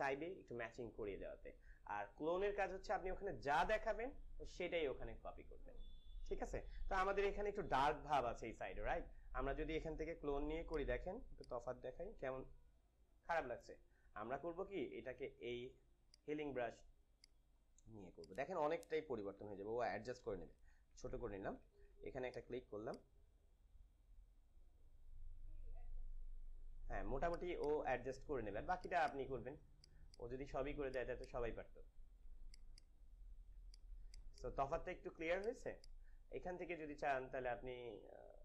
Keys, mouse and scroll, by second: 10.1 s, 10.6-14.1 alt+drag, 14.1 ctrl+alt+z, 16.0 click, 17.2 right click, 18.1 click, 19.3 =, 20.5 [, 20.7 [, 20.9 [, 21.1 [, 22.2 alt+click, 22.4-35.3 alt+drag.